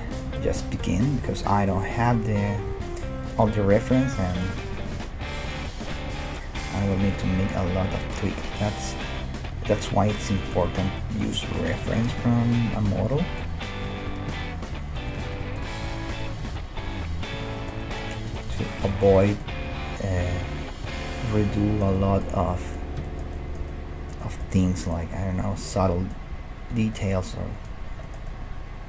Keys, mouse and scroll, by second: 2.0 g, 3.5 right click, 3.5 g, 5.2 g, 6.0 middle click, 6.5 g, 7.3 g, 8.8 middle click, 10.6 a, 10.8 a, 11.8 e, 13.0 ctrl+z, 13.9 r, 15.0 middle click, 15.4-17.2 middle drag, 15.8 g, 17.5-18.9 middle drag, 19.6 g, 25.1 g, 26.3 g.